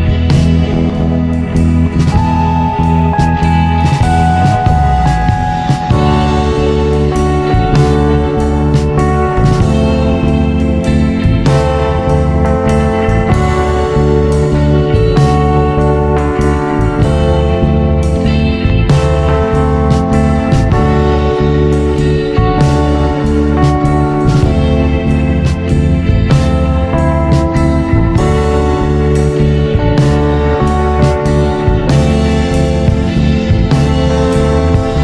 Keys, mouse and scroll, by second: 0.4 click, 1.4 Tab, 2.0 click, 3.0 shift+click, 3.7 shift+click, 4.5 shift+click, 6.0 ctrl+KP_3, 6.6-6.9 scroll up 2, 8.0 ctrl+b, 14.1 click, 15.5 scroll down 1, 15.9 Tab, 16.8 click, 18.2 click, 18.9 Tab, 19.4-20.1 scroll up 1, 20.1 alt+click, 21.7 ctrl+b, 24.3 click, 25.8 click, 26.4 click, 27.6 ctrl+KP_3, 28.1-28.9 scroll up 5, 28.9-29.9 scroll down 1, 29.9 click, 32.2 i, 34.9 i.